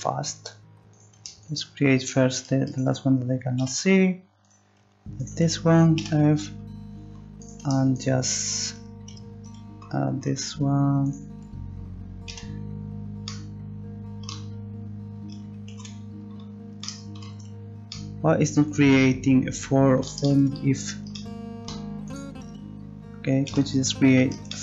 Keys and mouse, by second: 3.4-6.2 right drag, 3.6 f, 6.0 f, 6.2-9.9 drag, 11.0-13.3 drag, 12.3 f, 15.7 ctrl+z, 20.2 middle click, 22.1-23.5 drag, 23.5 f.